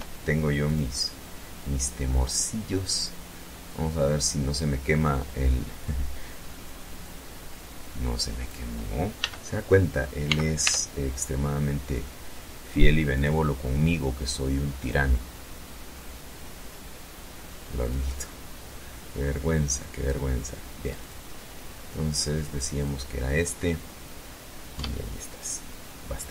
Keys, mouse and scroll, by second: 0.7 click, 5.9-7.6 drag, 8.1 n, 9.1 n, 9.5 t, 12.0 click, 13.7 click, 16.7 click, 18.2 scroll up 1, 19.9 click, 21.6 click, 22.4-22.7 scroll down 1, 23.6 Tab.